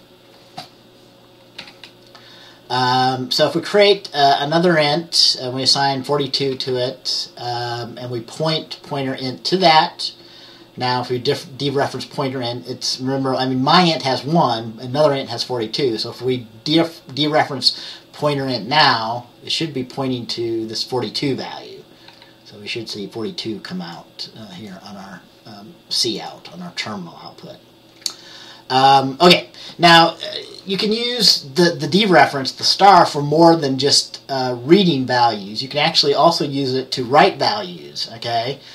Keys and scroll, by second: 1.7 F10, 6.6 F10, 9.7 F10, 22.2 F10.